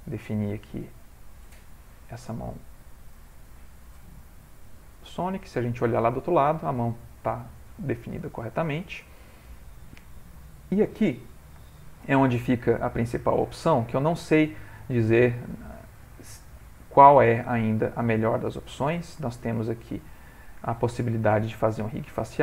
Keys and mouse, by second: 1.7 click, 2.7 r, 3.9 g, 4.7 middle click, 5.3 ctrl+middle click, 5.5 middle click, 5.9 middle click, 6.9 middle click, 7.0 middle click, 7.9 shift+middle click, 8.0 shift+middle click, 8.3 ctrl+middle click, 8.5 ctrl+middle click, 8.9 shift+middle click, 9.2 ctrl+middle click, 11.6 shift+middle click, 12.4 ctrl+middle click, 12.9 shift+middle click, 13.2-13.7 shift+middle click, 13.4 middle click, 15.6 click, 16.2 middle click, 16.7 shift+middle click, 17.2 click, 17.8 g, 20.2 ctrl+middle click, 21.9 click.